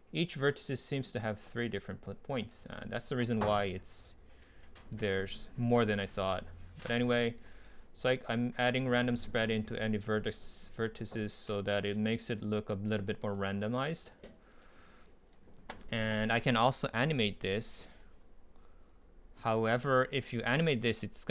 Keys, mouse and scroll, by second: 7.5 right click, 11.2 click, 12.7-13.0 drag, 13.0-13.4 middle drag, 13.4-14.0 right drag, 14.0 click, 14.6 right drag, 20.4 ctrl+z.